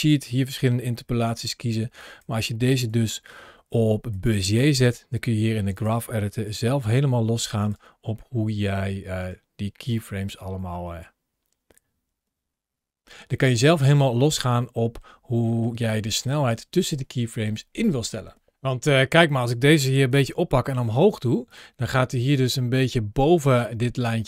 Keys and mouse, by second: 1.9 drag, 2.7 t, 5.6 click, 6.3 g, 6.7 click, 7.6 g, 9.0 click, 9.8-11.0 middle drag, 14.0 middle click, 15.2 g, 19.9 g, 21.3 click, 22.3 ctrl+shift+a.